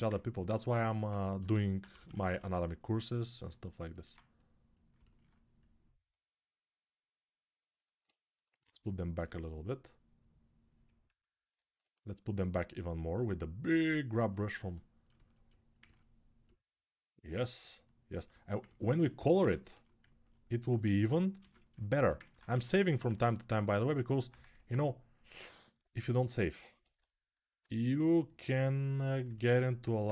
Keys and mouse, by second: 1.2 g, 1.6 ], 1.7 ], 4.7-10.8 ctrl+alt+drag, 10.8-15.1 right drag, 19.1-21.8 ctrl+alt+drag, 21.2 ctrl+s, 22.3 1, 22.9 1, 25.7-28.2 alt+drag.